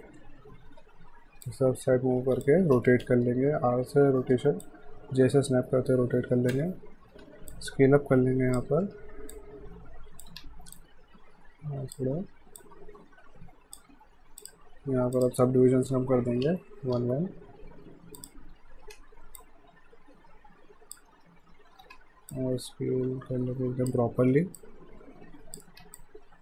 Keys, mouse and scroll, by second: 0.8 w, 1.5 click, 2.8 e, 4.7 click, 4.8-5.2 typing, 7.5 click, 8.8 w, 9.3 click, 10.3 r, 10.7 click, 12.2 w, 12.6 click, 16.7 Tab, 18.2 click, 18.9 r, 19.4 click, 21.1-22.4 typing, 22.3 click, 24.3 w, 24.6 click, 25.7 r, 26.0 click.